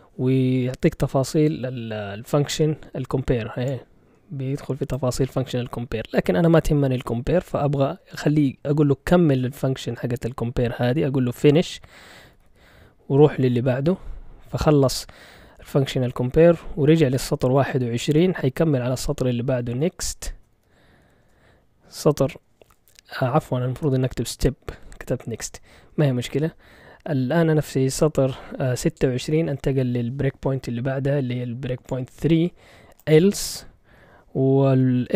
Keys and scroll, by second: 11.4-13.0 typing, 13.1 Return, 19.3-21.0 typing, 21.2 Return.